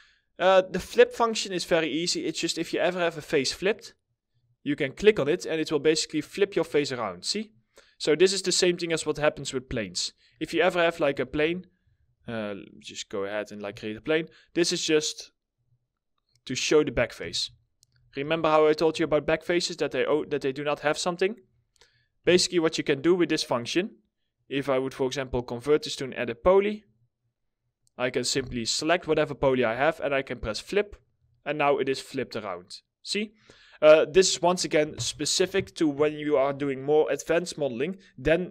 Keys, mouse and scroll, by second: 1.2 middle click, 1.8 scroll up 1, 7.6 middle click, 7.8-8.2 scroll down 1, 9.8 shift+click, 10.8 ctrl+z, 13.3-13.6 scroll down 1, 13.6 middle click, 16.7 w, 17.0 alt+scroll down 1, 17.1 alt+middle click, 17.4 e, 18.4 w, 19.8 alt+middle click, 21.0 alt+scroll up 2, 21.1 alt+middle click, 21.7 4, 23.8 right click, 27.3 middle click, 27.8 4, 30.4 double click, 30.8 alt+middle click.